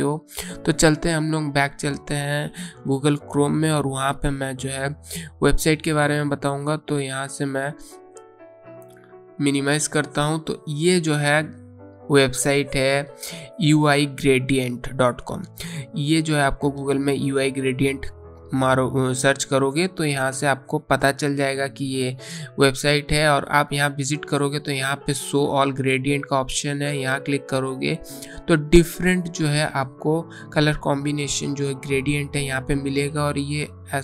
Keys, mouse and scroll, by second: 9.5 click, 13.6 click, 25.9 click, 31.0-32.0 scroll down 1.